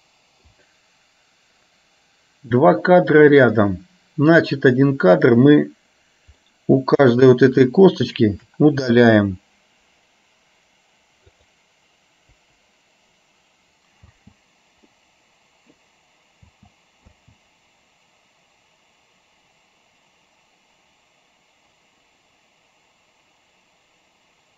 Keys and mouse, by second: 2.9 click, 4.6 click, 6.6 middle click, 7.7 shift+click, 11.4 click, 12.4 Delete, 14.3 space, 15.2 middle click, 16.7 space, 17.2 space.